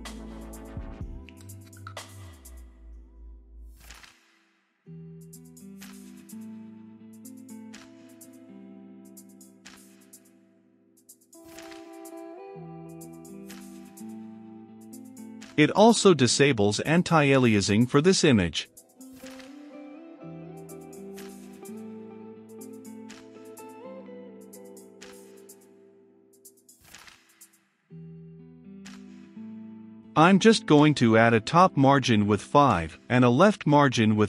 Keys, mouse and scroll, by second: 14.3 click, 15.0 click, 15.5-17.3 typing, 17.0-34.2 drag.